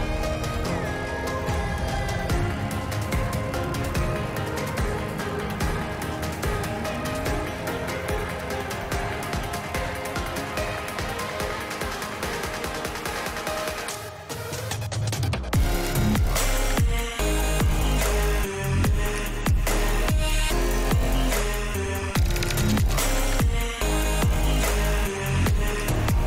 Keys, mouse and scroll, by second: 6.0 shift+a, 13.1 click, 13.7 ctrl+t, 14.3 middle click, 14.8 click, 15.1 click, 15.9 middle click, 16.3 click, 16.9 middle click, 17.0 middle click, 18.9 middle click, 19.5-21.1 middle drag, 22.6 middle click, 23.9 shift+middle click, 25.9 click.